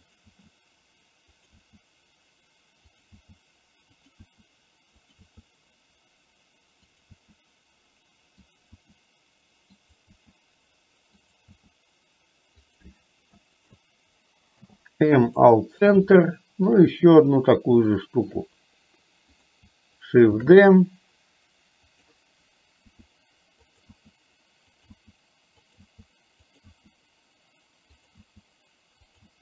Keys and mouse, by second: 0.4 e, 4.3 e, 13.4 shift+e, 13.8 shift+click, 14.6 m, 16.3 shift+middle click, 18.0 shift+middle click, 20.4 shift+d, 23.0 e, 24.0-29.4 e.